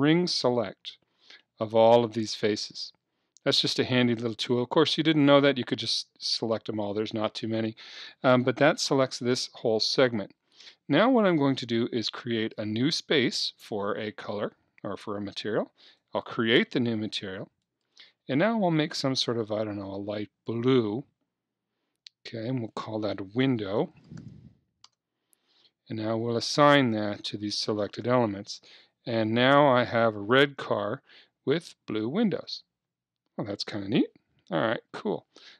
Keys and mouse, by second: 2.4-4.5 middle drag, 12.2-14.0 drag, 16.0-19.6 drag, 22.7-24.6 drag, 26.4-28.1 drag, 28.1 KP_3, 30.6 Tab, 31.1 click, 31.2 middle click.